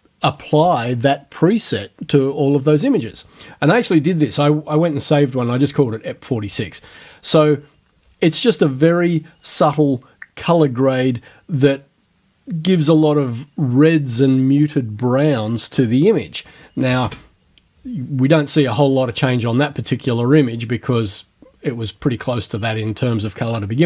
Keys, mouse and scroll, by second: 4.3 click, 5.9 click, 17.1 ctrl+f, 18.8 click.